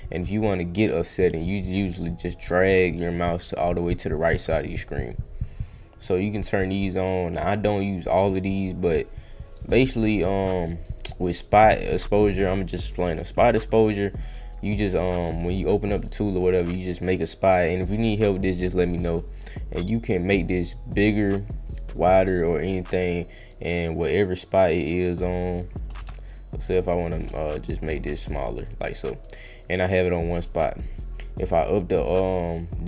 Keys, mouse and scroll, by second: 6.1 click, 6.5 click, 6.9 click, 8.8 click, 9.4 click, 9.9 click, 10.5 click, 11.0 click, 11.3 click, 13.2 click, 21.1-23.5 drag, 24.2-25.5 drag, 26.3 shift+click, 26.7 shift+click, 27.6-29.3 drag, 29.9 click, 31.4-32.8 drag.